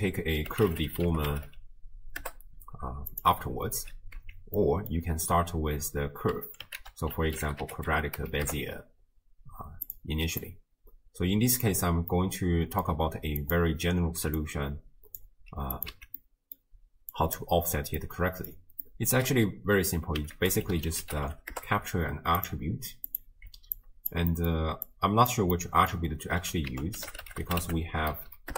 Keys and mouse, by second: 4.2 x, 4.6 click, 6.8 ctrl+a, 10.5-11.7 drag, 12.3-12.8 drag, 13.4 click, 14.4 click, 15.8 click, 15.9 x, 16.3 right click, 17.1 click, 18.1 middle click, 18.9 middle click, 20.4 ctrl+a, 23.1-24.1 drag, 24.3 middle click, 24.9 click, 25.6 middle click, 26.7 ctrl+a, 28.3 Down.